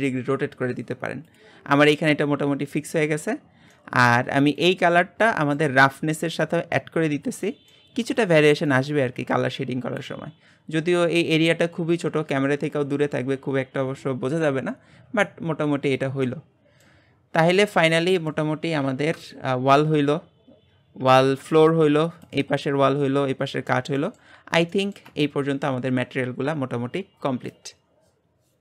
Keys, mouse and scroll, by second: 1.4 click, 14.9-16.3 scroll down 4, 16.3-17.1 shift+middle drag, 17.1-17.5 scroll down 5, 17.5-19.1 middle drag, 19.1 KP_Divide, 21.3 KP_Divide, 22.3 click, 22.6-28.6 middle drag.